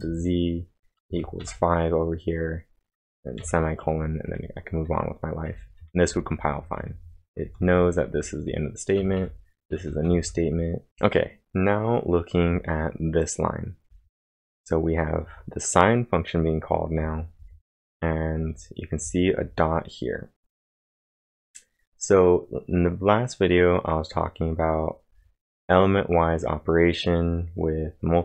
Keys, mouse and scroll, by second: 0.0-2.0 typing, 4.0-11.4 typing, 12.7-13.7 typing, 17.4 typing, 19.0 typing, 21.3 typing.